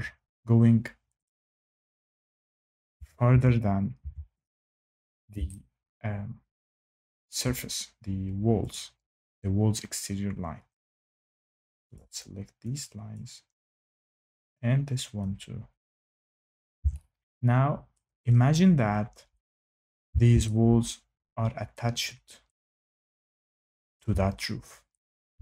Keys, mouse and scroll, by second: 1.2 click, 2.0 click, 2.9 Tab, 3.2 Tab, 3.9 Tab, 4.4 click, 7.2 shift+middle click, 8.6 click, 11.1 click, 11.9 click, 13.1 click, 14.5 click, 16.0 click, 16.5 click, 17.9 shift+middle click, 19.8 shift+middle click, 23.9 shift+middle click.